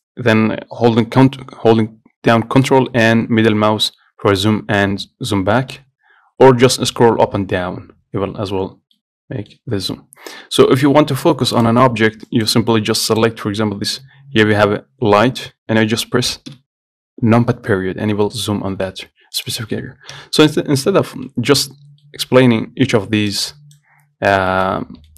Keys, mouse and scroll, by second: 3.0-5.8 ctrl+middle drag, 6.8 scroll down 4, 7.1 scroll up 1, 7.5 scroll down 1, 7.8 scroll up 1, 8.1 scroll down 1, 8.5 scroll up 1, 8.8 scroll down 2, 9.2-10.3 middle drag, 10.3 scroll down 1, 10.5 scroll up 1, 10.7-11.0 scroll down 2, 11.2-11.8 scroll up 4, 11.8 click, 12.5 click, 16.8 KP_Decimal, 18.0-18.4 scroll down 11, 18.5-19.6 middle drag, 19.6 click, 20.4 KP_Decimal, 21.0 scroll down 2, 21.5 middle click, 22.0-22.3 scroll down 1, 22.3 middle click, 22.6 scroll up 2, 22.8-23.6 scroll down 1, 23.6 click, 24.8 shift+middle click, 25.0-25.1 scroll up 2.